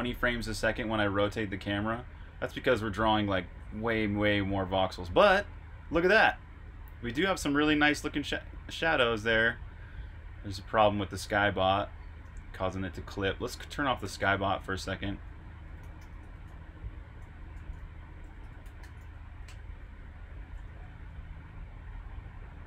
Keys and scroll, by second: 0.2 e, 1.8 r, 3.3-4.4 typing, 12.2 super+q, 13.7-20.6 typing, 22.3-22.6 typing.